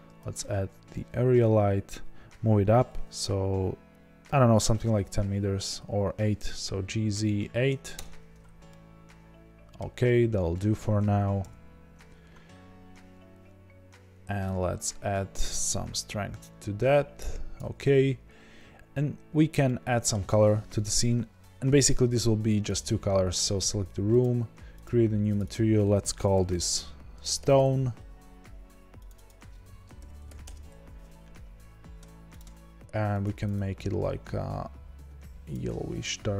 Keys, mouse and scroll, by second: 4.2 g, 8.0 KP_Enter, 8.6-14.5 middle drag, 11.4 KP_0, 14.5-19.6 drag, 19.6-24.9 middle drag, 20.2-22.7 scroll up 2, 22.7 click, 24.9 click, 25.2 click, 25.4-32.5 drag, 27.2 l, 27.2 Return, 27.2 BackSpace, 30.5 Return.